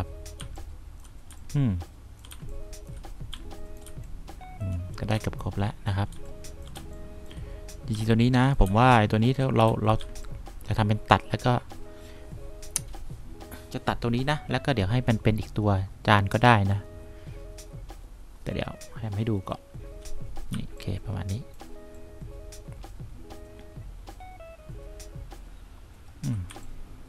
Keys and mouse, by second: 0.7 3, 1.6 2, 2.7 1, 3.7 2, 4.2 3, 5.5 1, 6.4 2, 7.1 1, 8.3 2, 9.0 3, 10.0 1, 10.3 2, 20.8 3, 26.8 2.